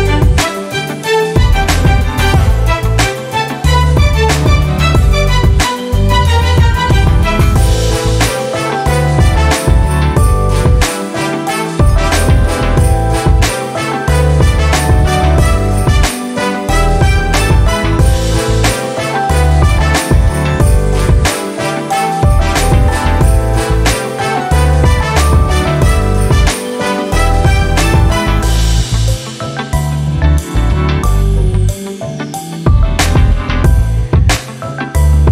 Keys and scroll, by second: 3.4 r, 31.9-33.9 typing.